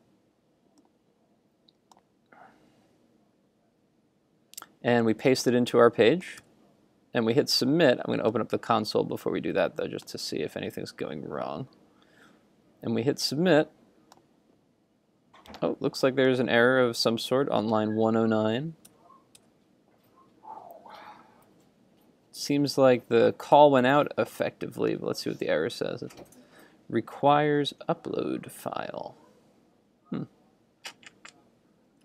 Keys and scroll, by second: 6.6 super+v, 18.9 super+Tab, 23.6 super+Tab.